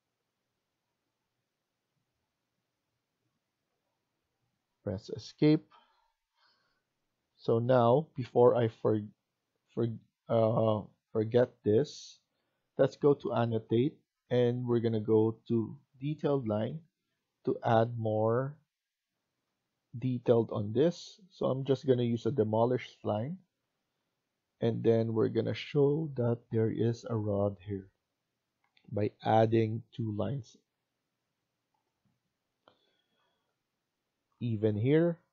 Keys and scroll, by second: 4.7 Escape, 5.0 Escape, 27.2 Escape, 31.9 Escape.